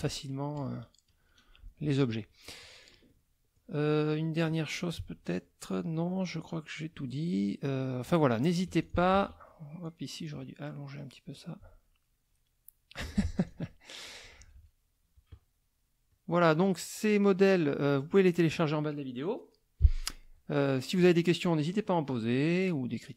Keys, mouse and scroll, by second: 0.6 KP_Subtract, 1.8 F1, 2.4 click, 3.0 click, 3.8 click, 4.5 click, 6.0 click, 6.7 click, 8.7 F2, 8.8 click, 9.1 ctrl+a, 9.8 click, 11.3-13.1 alt+drag, 13.2 alt+F1, 13.3 alt+click, 14.0 KP_Subtract, 16.1 click, 16.8 click, 17.7 click, 21.8 click, 23.0 click.